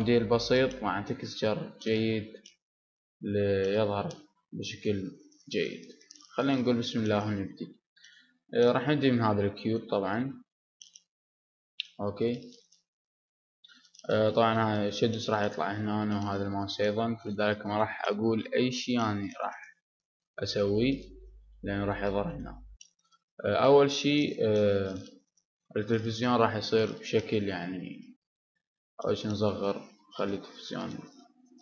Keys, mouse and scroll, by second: 4.7-6.7 middle drag, 7.7-10.2 middle drag, 11.3 Tab, 11.8-13.0 middle drag, 17.1-19.0 middle drag, 19.1-21.7 middle drag, 22.1-27.5 middle drag, 28.3 s.